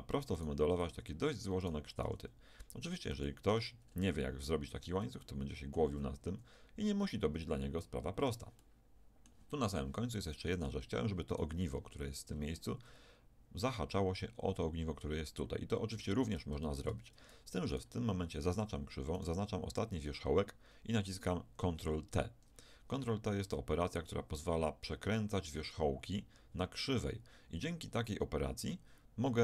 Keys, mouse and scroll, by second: 0.9 Tab, 2.0 g, 3.5 Tab, 5.0-6.6 middle drag, 7.8-11.3 middle drag, 11.3-13.6 right drag, 13.6-14.6 middle drag, 16.2 Tab, 16.9 Tab, 17.7 right click, 18.5 Tab, 20.0-21.3 right drag, 22.1 ctrl+t.